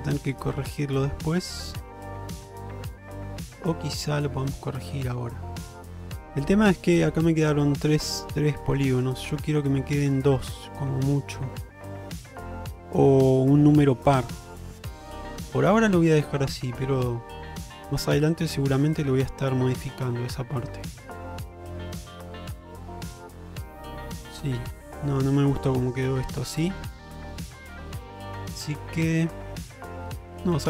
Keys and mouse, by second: 3.5 shift+middle click, 3.9 middle click, 6.3 shift+middle click, 6.7 middle click, 9.5-13.8 middle drag, 14.4 middle click, 15.4 shift+middle click, 15.9-17.9 middle drag, 18.2 shift+middle click, 18.6-24.3 middle drag, 24.6 middle click, 25.9-29.7 middle drag, 30.4 click.